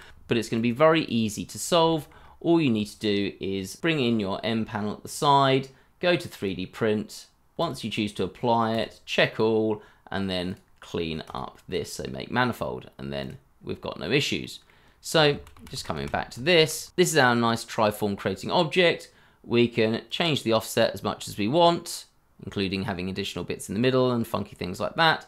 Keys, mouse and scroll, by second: 0.1 ctrl+z, 1.5 scroll down 1, 1.8 shift+middle click, 2.2 scroll up 1, 3.8 t, 4.1-6.2 scroll down 1, 9.3-11.4 scroll down 1, 12.3-13.3 scroll up 1, 14.4 middle click, 14.8 scroll down 1, 15.3 ctrl+z, 17.4 middle click, 18.4 scroll up 1, 18.6 middle click.